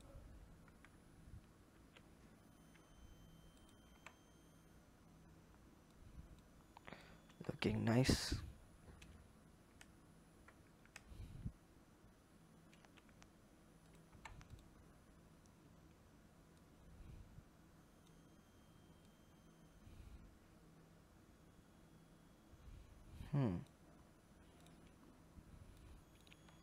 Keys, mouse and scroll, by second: 1.5 ctrl+b, 3.7 Tab, 5.7 click, 6.6 click, 7.0 Tab, 7.7 alt+click, 12.3 ctrl+b, 13.9 Tab, 14.3 click, 14.6-16.4 scroll down 5, 16.4 click, 18.9 click, 23.8-24.4 scroll up 4, 24.4 click, 24.7-25.5 scroll up 2, 25.5 click, 26.3 Tab.